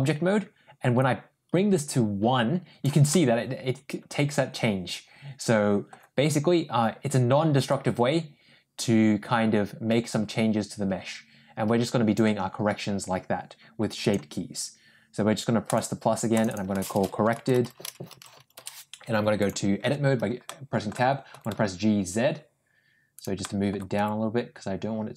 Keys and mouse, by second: 1.0-2.7 drag, 3.0-5.8 middle drag, 7.6-12.1 drag, 15.5 click, 16.2 click, 16.4-19.0 shift+drag, 17.4 r, 19.7 Tab, 20.3 middle click, 21.2 g, 23.3 middle click, 23.8 g.